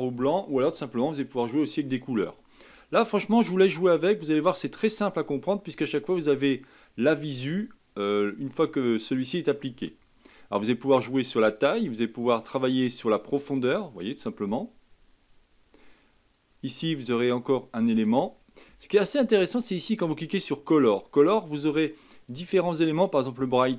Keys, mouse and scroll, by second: 4.1-7.1 drag, 7.5-8.7 middle drag, 8.7-9.1 scroll down 1, 9.1-12.0 middle drag, 12.0-15.0 drag, 16.3-19.3 drag, 20.3 click, 20.8 scroll down 2, 22.6-23.2 scroll down 1, 23.2-23.7 drag.